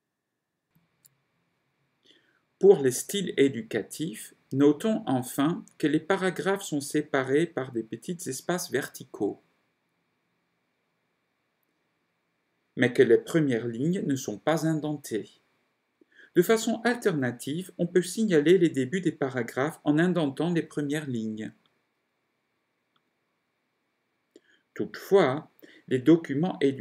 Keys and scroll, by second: 0.8 ctrl+0.